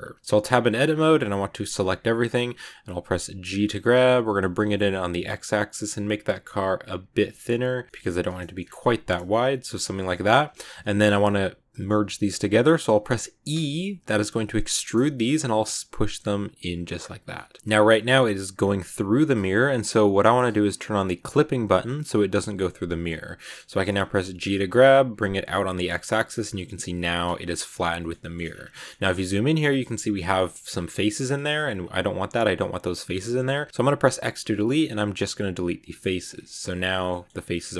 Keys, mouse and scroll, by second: 0.1 Tab, 0.2 Tab, 0.7 scroll down 2, 1.5 a, 7.9 shift+middle click, 7.9 scroll up 1, 8.1 middle click, 8.5 scroll down 1, 8.7-10.1 middle drag, 10.1-10.7 scroll up 2, 10.7-12.2 middle drag, 12.2-12.8 scroll down 2, 12.8-13.4 scroll down 1, 13.4 e, 17.2 scroll up 1, 17.2 middle click, 17.6 g, 21.2 click, 22.9 click, 23.2-24.3 middle drag, 24.3 g, 27.8 scroll up 1, 27.9 shift+middle click, 28.4-29.0 scroll up 8, 28.6 middle click, 29.1 middle click, 30.0 scroll down 1, 30.2 shift+middle click, 30.7-31.0 scroll down 6, 31.0 scroll up 1, 31.1 middle click, 31.4 z, 31.6-32.2 scroll down 5, 32.2 middle click, 33.0 z, 33.2 middle click, 33.4 scroll up 1, 33.7 z, 35.9 middle click, 36.1-36.8 scroll up 7, 36.2 shift+middle click, 36.9 middle click, 37.4 scroll down 4, 37.6 middle click.